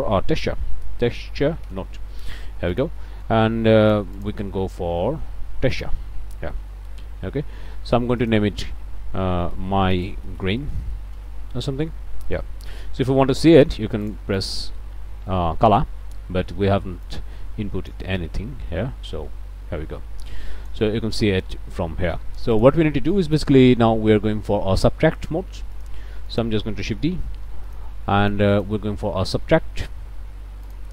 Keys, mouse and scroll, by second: 0.4 t, 0.5 e, 1.7 Return, 2.7 click, 3.1 click, 3.8 click, 5.7 click, 6.5 click, 8.2 click, 9.5-10.9 typing, 11.2 shift+Return, 12.7 click, 14.1 ctrl+shift+click, 14.4 ctrl+shift+click, 17.0-18.1 drag, 20.3 click, 22.6 click, 23.1 click, 23.2 scroll up 1, 25.8 click, 26.3 click, 27.1 shift+d, 27.7 shift+click, 28.2 click, 30.6 click.